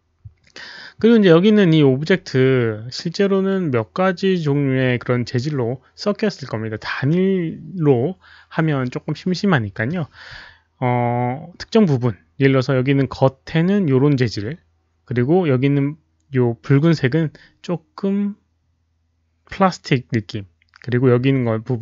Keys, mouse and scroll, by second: 4.6 Return, 4.6 KP_1, 4.6 KP_0, 4.6 KP_Decimal, 5.8 KP_0.